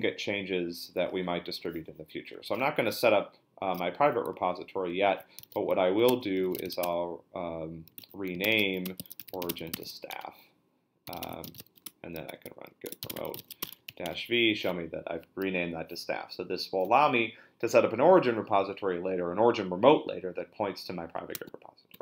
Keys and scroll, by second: 5.1 ctrl+l, 5.1-14.4 typing.